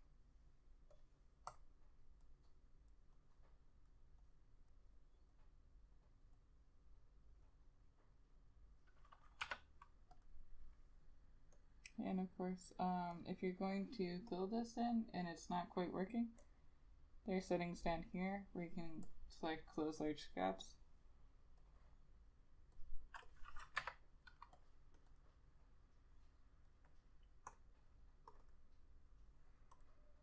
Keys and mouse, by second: 9.5 k, 23.9 Delete, 25.1 double click, 28.6 double click.